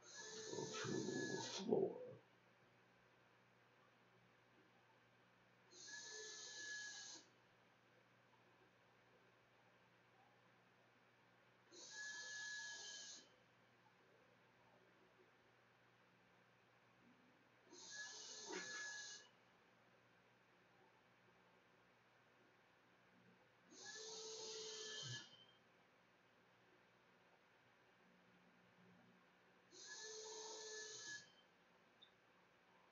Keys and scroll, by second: 27.0-27.9 typing.